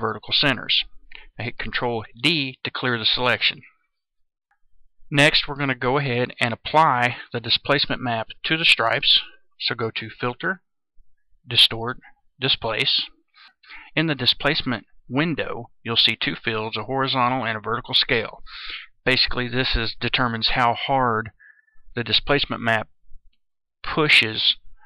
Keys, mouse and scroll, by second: 2.0 ctrl+d, 10.1 click.